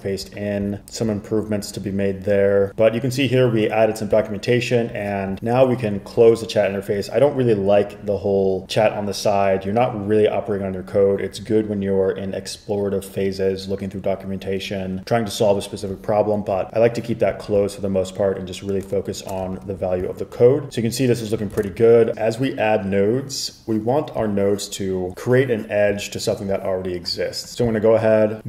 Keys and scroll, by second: 19.7 super+=, 21.7 super+Tab.